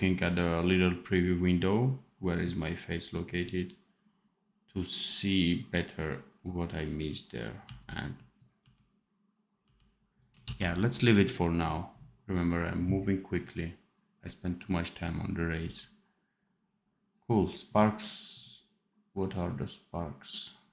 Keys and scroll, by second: 7.6 d, 8.6 d, 9.6 d, 10.4 ctrl+s.